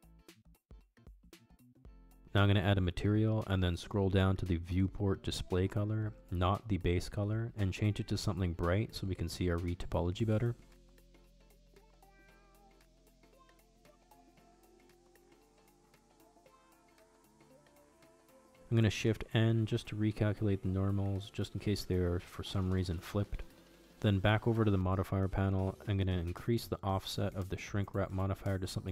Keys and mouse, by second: 0.0-2.6 drag, 5.0 click, 6.6 click, 6.9-10.1 drag, 8.5 o, 13.8 click, 15.8 click, 21.4 a, 22.2 shift+n, 24.4 click, 26.1-28.0 drag, 28.3-28.9 drag.